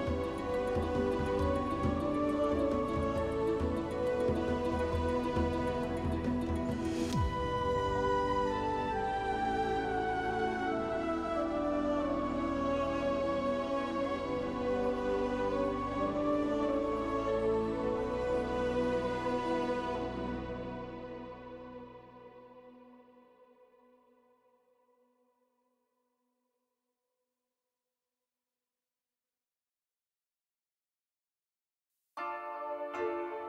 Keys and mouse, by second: 1.8 alt+shift+click, 2.5 alt+shift+click, 3.2 middle click, 3.7-6.8 middle drag, 9.9 click, 11.4 alt+click, 13.6 alt+shift+click, 18.1 click, 20.4 alt+shift+click, 21.9 alt+shift+click, 23.0 alt+shift+click, 28.2 click, 28.5 shift+click, 29.1 shift+click, 30.0 click, 31.8 shift+click, 32.3 click, 33.2 shift+click.